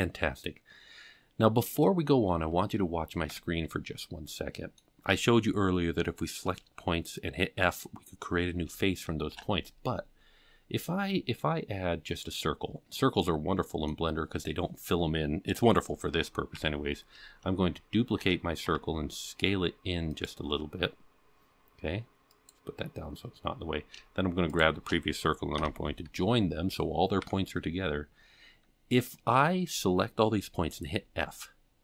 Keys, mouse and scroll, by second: 3.3 Tab, 3.8-4.3 scroll down 2, 4.3-4.7 middle drag, 9.3 shift+a, 13.2-13.8 middle drag, 16.5 KP_7, 18.2 shift+d, 22.3 click, 23.5-24.2 scroll up 2, 24.5 shift+click, 25.5 ctrl+j, 27.2 Tab.